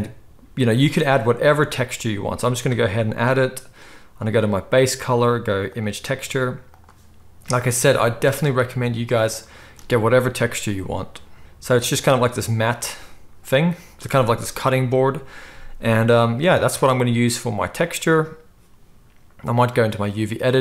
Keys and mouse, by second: 1.5 click, 1.6-2.4 middle drag, 2.4-12.0 drag, 12.0-20.6 middle drag.